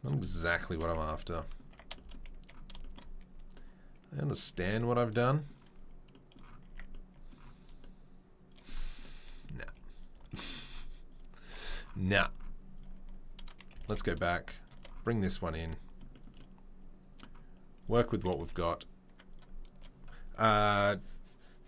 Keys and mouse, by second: 1.0 Tab, 1.7 Tab, 4.5 a, 6.6 Tab, 9.6 Delete, 9.9 click, 10.0-11.1 middle drag, 10.2 Delete, 11.1 click, 11.2-12.7 middle drag, 12.7 click, 12.8-21.6 middle drag, 13.7 g, 18.4 Delete.